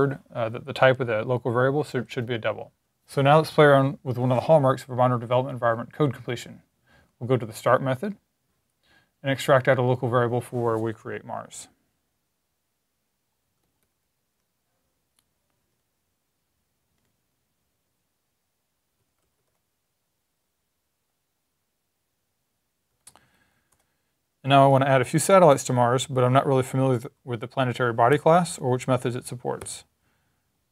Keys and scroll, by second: 12.9 Right, 12.9 Right, 13.0 Right, 13.1 Right, 13.7 Left, 13.9 Left, 18.6-19.8 typing, 22.9 super+Right, 23.1 Down, 23.9 Up, 24.1 super+s, 27.7-29.5 typing.